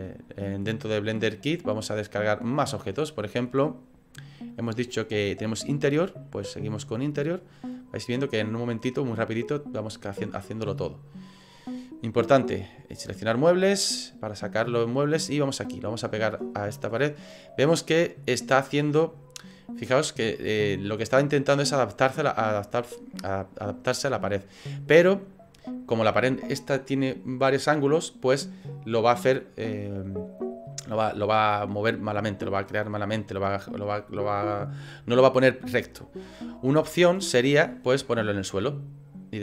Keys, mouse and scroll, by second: 0.7 click, 7.4 click, 12.3 click.